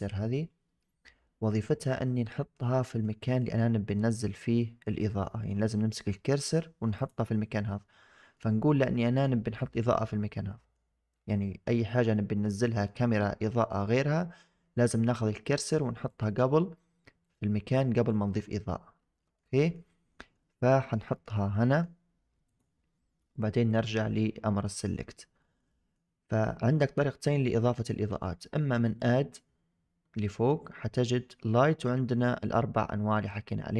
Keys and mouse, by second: 1.9-2.4 shift+middle drag, 2.7 middle click, 3.1 shift+middle drag, 3.4-3.8 middle drag, 4.5 middle drag, 5.1 shift+drag, 6.2 click, 6.8 click, 8.2-9.1 middle drag, 10.0-10.6 middle drag, 11.3 middle drag, 12.0-12.3 shift+middle drag, 12.6 middle drag, 13.1 shift+middle drag, 17.1 click, 17.8 click, 19.1 middle drag, 19.4 shift+middle drag, 19.8 middle drag, 20.6 middle drag, 21.0 shift+middle click, 21.5 middle click, 22.4 click, 23.6 click, 25.3 shift+middle click, 25.6 middle drag, 28.8-33.7 drag.